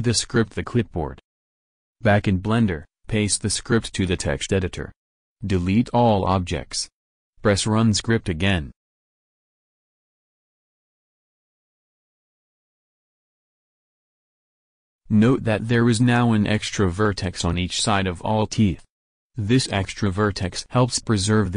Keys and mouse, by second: 4.1 ctrl+v, 4.4 ctrl+a, 5.5 ctrl+v, 8.0 x, 9.8-11.2 drag, 11.3 KP_1, 11.5 KP_7, 15.5 Tab, 16.5 Tab, 17.1 Tab.